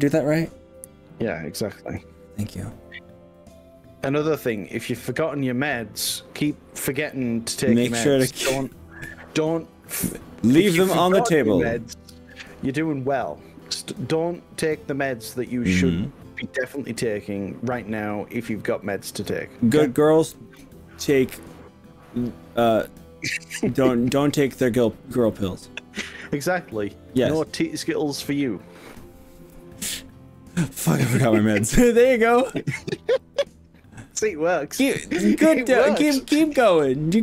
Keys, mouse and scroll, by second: 33.2-35.7 middle drag, 35.9-37.2 middle drag.